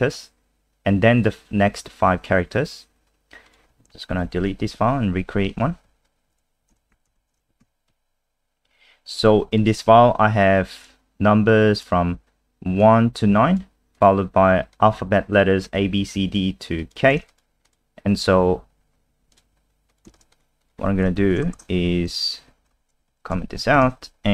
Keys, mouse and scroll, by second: 4.1 Home, 4.3 End, 4.7 Delete, 5.5 click, 6.4 End, 6.7 Return, 6.9 /, 7.2 *, 7.6 ctrl+s, 7.9 F5, 9.6 click, 9.7 click, 10.9 click, 17.7 click, 19.3 click, 20.2 click, 20.3 click, 20.6 click, 21.2 shift+Home, 21.5-23.3 typing, 23.1 Home, 23.6 Down.